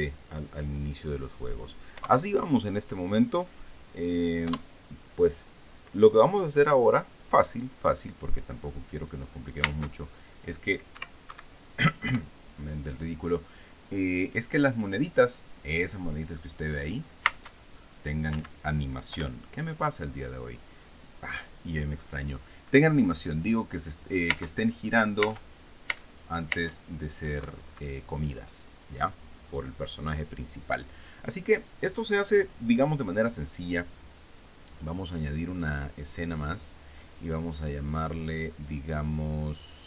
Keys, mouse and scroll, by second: 2.6 p, 5.1 p, 11.9 Escape, 12.7 p, 18.5 space, 19.0 Escape, 19.7 p, 25.9 space, 26.6 space, 27.1 space, 28.1 Escape, 37.1 click, 38.9 click.